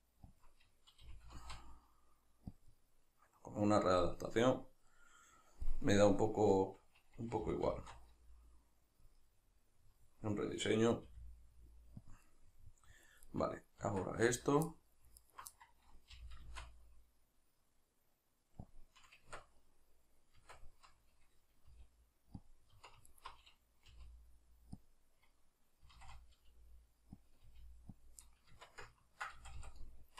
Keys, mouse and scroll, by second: 0.5 click, 0.7-2.7 middle drag, 1.1 g, 2.7 click, 2.7-9.1 middle drag, 7.5 g, 9.1 click, 9.2-12.2 middle drag, 11.1 r, 12.2 click, 12.2-13.2 middle drag, 13.2 right click, 13.8 Tab, 14.7 middle click, 15.2 alt+right click, 15.6-18.8 middle drag, 16.1 g, 18.8 click, 18.9-22.5 middle drag, 19.3 Tab, 20.4 Tab, 22.5 click, 23.1 alt+right click, 23.9 g, 24.9 click, 25.9 s, 27.3 click, 27.5 g, 28.1 click, 28.3 middle click, 28.5 Tab, 29.4 a, 29.8 middle click.